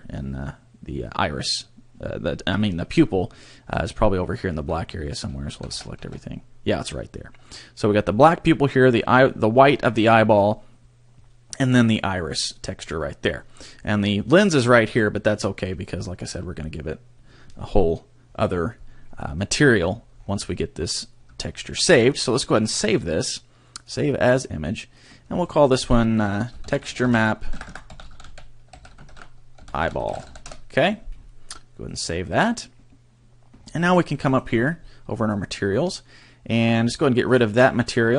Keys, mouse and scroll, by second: 4.5 Tab, 5.5 a, 5.7 a, 6.0 a, 19.7-20.4 scroll up 10, 21.3 Tab, 22.3 click, 32.3 click, 33.5-34.0 scroll up 7, 34.3 click, 34.5-35.1 scroll up 1, 35.1 scroll up 1, 35.3 click, 35.7 scroll up 2, 37.3 click.